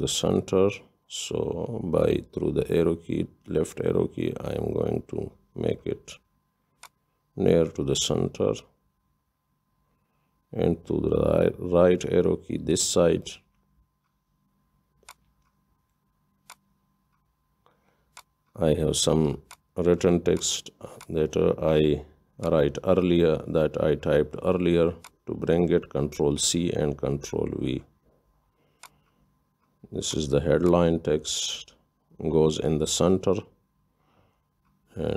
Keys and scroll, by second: 1.5 Left, 2.8 Left, 3.1-3.7 Left, 3.5 Left, 3.8 Left, 4.1 Left, 4.3 Left, 4.5-5.0 Left, 10.5 Right, 10.8 Right, 11.5 Right, 11.8 Right, 11.9 Right, 12.1 Right, 12.2 Right, 12.8-13.1 Right, 23.5 ctrl+shift+c, 27.0 ctrl+v.